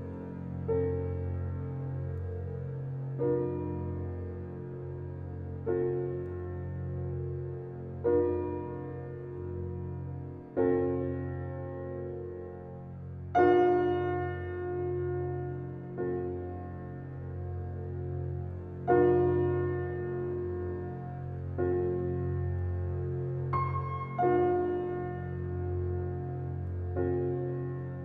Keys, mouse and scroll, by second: 0.4 click, 1.1-2.3 typing, 2.4 Return, 4.8 d, 5.9 scroll down 1, 6.1 alt+click, 7.0 w, 8.6 click, 16.3 alt+middle click, 16.9-21.3 drag, 21.3 e, 21.9-23.4 drag, 23.4 w, 24.2-27.0 drag, 27.1 alt+right click, 27.6 alt+middle click.